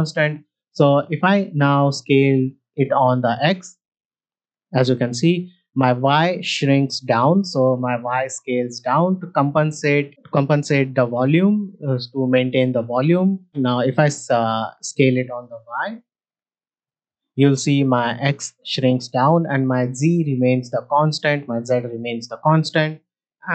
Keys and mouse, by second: 4.2 s, 4.3 x, 16.0 s, 16.1 y, 20.5 middle drag.